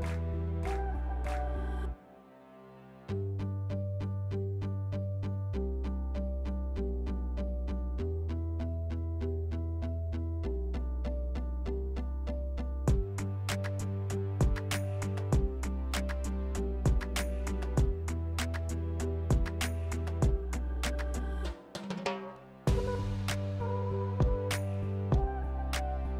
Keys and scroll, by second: 4.1 s, 5.3 s, 8.1 s, 11.5 3, 13.3 s, 17.1 3, 19.5 s, 20.3 5, 22.0 s, 25.2 s.